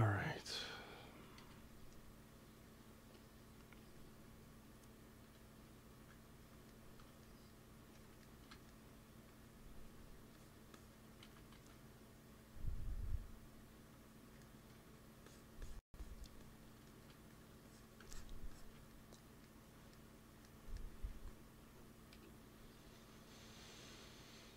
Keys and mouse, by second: 1.6 KP_3, 9.2 f, 9.7 f, 11.2 ctrl+z, 11.5 ctrl+z, 14.6 f, 18.0-20.3 drag, 21.0 ctrl+s, 22.0 KP_1.